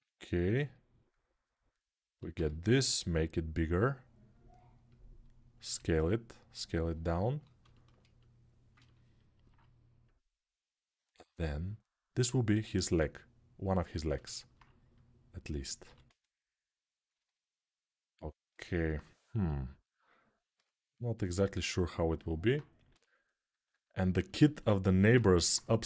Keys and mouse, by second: 2.1 g, 2.8-4.7 middle drag, 4.7-6.4 drag, 5.5 s, 6.4-9.9 ctrl+alt+middle drag, 9.9-16.8 drag, 15.6 g, 16.8-19.0 alt+middle drag, 19.0-21.0 drag, 20.3 g, 21.0-25.8 alt+middle drag, 22.6 g.